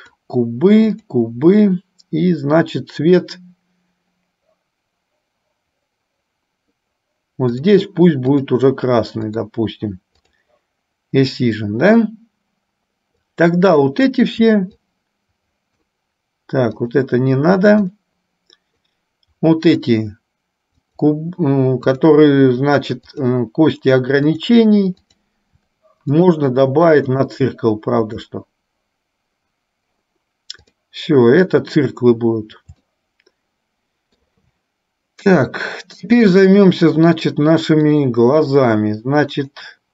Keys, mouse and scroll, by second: 1.3 click, 8.4-9.8 drag, 10.4 click, 13.3-14.4 drag, 15.1-16.2 shift+drag, 16.9 shift+click, 18.1 shift+click, 19.1-20.2 shift+drag, 21.1 shift+click, 22.2 shift+click, 23.3 shift+click, 24.4 shift+click, 25.3 shift+click, 26.4-27.6 drag, 28.3 click, 30.7 click, 33.2 shift+middle click, 34.2 shift+middle click, 35.7 shift+middle click, 38.1 middle click, 39.6 click.